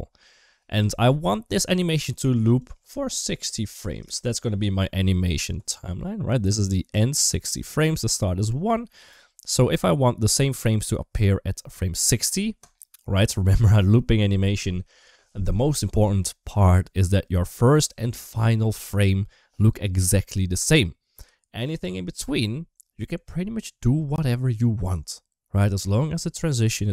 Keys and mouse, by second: 2.6 click, 12.4 click.